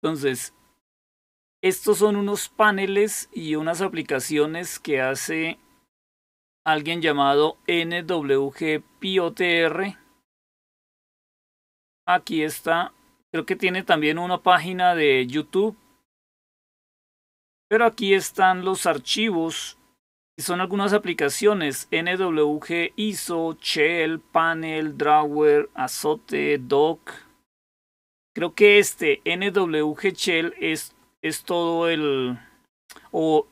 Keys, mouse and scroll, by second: 10.8 click, 17.7-19.7 scroll down 3, 20.3-21.0 scroll down 2, 29.9 click.